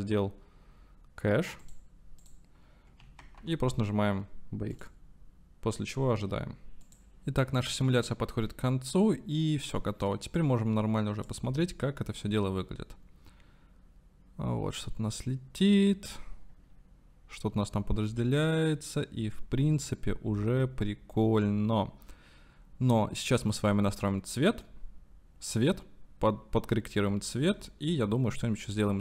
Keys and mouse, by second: 1.6 click, 2.2 click, 3.3 ctrl+s, 9.1 click, 10.6 click, 10.7-11.5 right drag, 11.6 space.